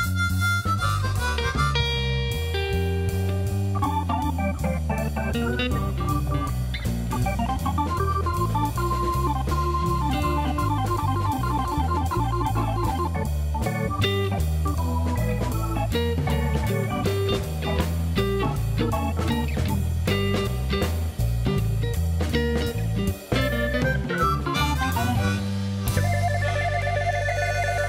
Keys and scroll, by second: 0.3 Tab, 3.5 i, 6.2 Tab, 13.5 alt+a, 21.0 shift+d, 21.1 x, 23.6 4, 23.8 Return, 25.6 f, 26.1 b, 26.3 f.